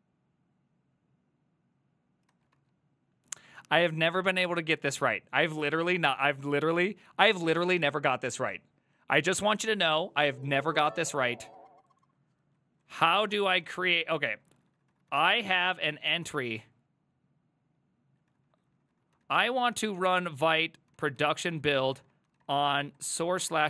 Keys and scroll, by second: 2.3 ctrl+a, 2.6 typing, 3.9-5.1 typing, 5.8 alt++, 12.6-16.8 typing, 14.8 ctrl+shift+Left, 18.1-23.6 typing.